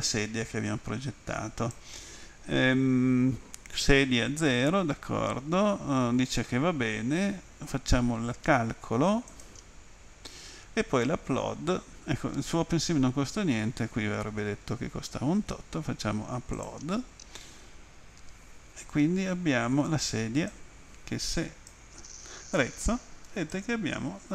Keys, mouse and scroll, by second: 9.3 click, 16.6 click, 20.5 click, 23.5 alt+click.